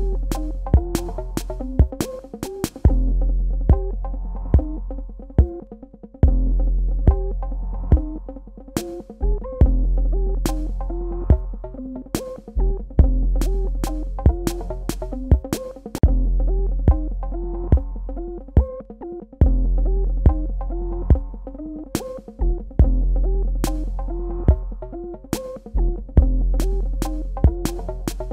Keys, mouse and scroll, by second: 1.6 click, 2.8-3.8 typing, 4.4 Tab, 5.7 super+KP_Add, 8.3 KP_Subtract, 10.5 click, 13.3 click, 14.5-15.4 typing, 15.9 Tab, 17.0 super+KP_Add, 19.1 super+KP_Subtract, 20.5 click, 21.3 g, 22.1 click, 26.3 v, 26.5 click, 27.5 Tab.